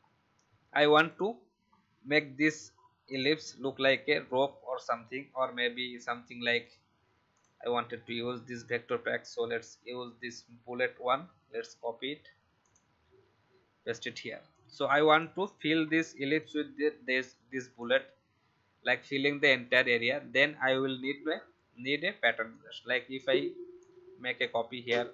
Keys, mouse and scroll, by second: 1.0 click, 1.6-3.1 alt+scroll up 1, 3.1 click, 11.2 ctrl+c, 12.6 click, 13.2 ctrl+v, 14.5-23.3 drag, 23.8 alt+click.